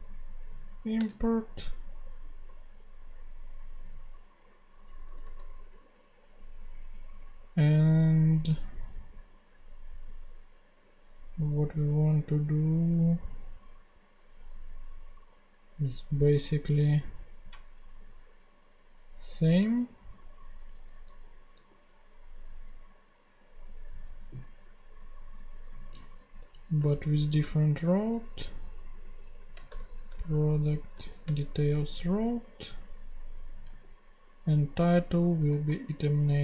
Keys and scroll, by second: 1.0 Return, 5.1 Tab, 8.3 ctrl+Tab, 19.6 super+c, 20.2 ctrl+super+c, 20.8 ctrl+super+Tab, 21.5 ctrl+super+Tab, 21.6 ctrl+super+v, 26.4 Right, 26.9 alt+shift+Left, 27.2 alt+shift+Right, 29.7 shift+BackSpace, 30.3 shift+-, 31.2 shift+Return, 32.0 Return, 33.8 super+x, 35.7 ;.